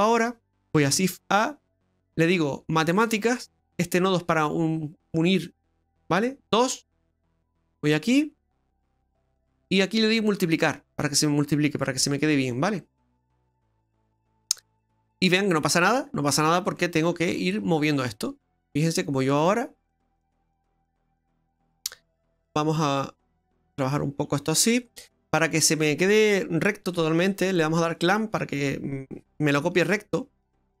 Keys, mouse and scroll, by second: 0.8 shift+a, 7.3 click, 10.4 click, 14.6 middle click, 15.2-15.7 scroll up 2, 15.7 middle click, 16.1-18.0 scroll up 14, 17.9 middle click, 18.5 scroll up 3, 19.9 middle click, 19.9-21.8 scroll up 11, 22.4 click, 25.1 scroll down 2, 25.3 middle click, 26.9 middle click, 28.0 click, 30.1 middle click, 30.6-30.8 scroll up 9.